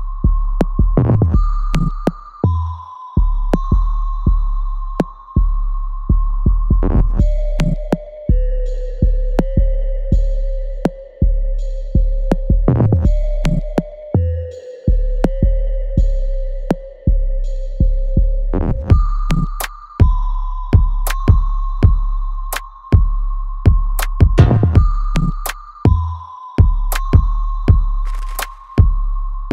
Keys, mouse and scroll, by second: 0.5 alt+right click, 1.9-4.0 drag, 4.0 alt+click, 5.2 alt+click, 5.6 alt+right click, 6.6-8.1 drag, 8.1 alt+click, 8.6 alt+middle click, 9.0 alt+right click, 9.4-13.0 alt+drag, 13.0-15.5 alt+drag, 15.5 alt+right click, 15.9 alt+click, 16.7 alt+middle click, 17.1 alt+right click, 18.3-21.6 drag, 21.6-27.2 alt+drag, 27.2-29.2 alt+drag.